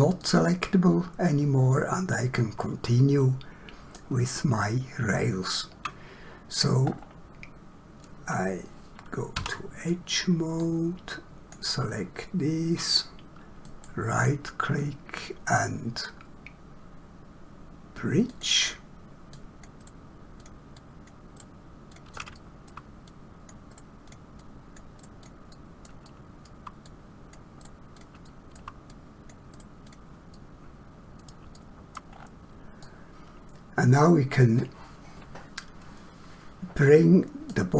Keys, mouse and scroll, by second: 0.2 middle click, 4.4 shift+middle click, 6.9 scroll up 1, 9.3 2, 10.5 click, 13.6 right click, 18.3 click, 19.8 right click, 20.4 click, 21.4 right click, 22.0 click, 22.4 shift+middle click, 23.1 click, 23.7 right click, 24.0 click, 25.0 right click, 25.2 click, 25.5 middle click, 26.0 shift+middle click, 26.9 click, 27.6 right click, 28.0 click, 28.3 shift+middle click, 28.9 click, 29.5 right click, 29.9 click, 30.4 middle click, 32.1 scroll down 1, 32.8 middle click.